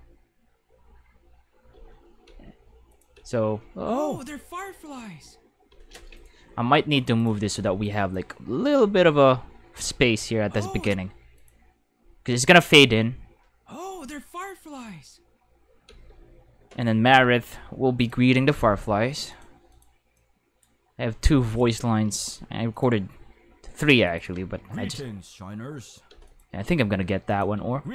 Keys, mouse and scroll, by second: 1.7 space, 2.3 space, 2.9 click, 3.1 space, 5.7 space, 6.1 right click, 6.4 g, 7.2 click, 7.8 click, 8.8 space, 10.8 space, 11.3 click, 12.0 space, 15.8 space, 18.0 click, 19.3 click, 19.7 click, 20.1 click, 21.5 click, 22.7 click, 24.1 click, 24.3 space, 26.1 space, 26.3 click, 27.3 click, 27.6 space.